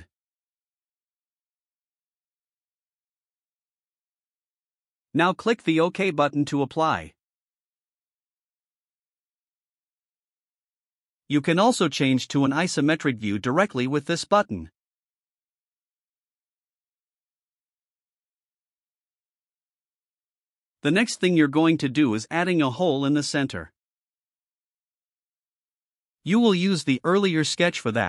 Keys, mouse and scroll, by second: 9.2 click, 15.6 click, 20.3-21.3 right drag.